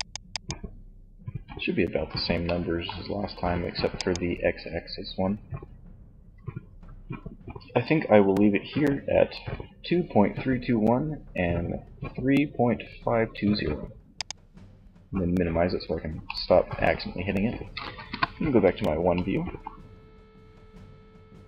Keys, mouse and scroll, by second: 1.4 middle click, 3.2 middle click, 3.3-5.0 drag, 13.4-15.2 drag, 17.3 KP_1.